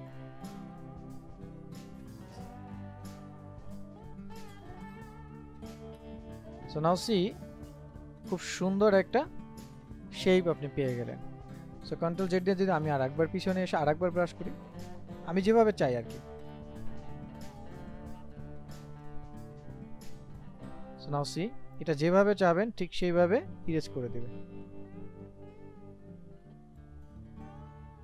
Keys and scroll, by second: 12.2 ctrl+z.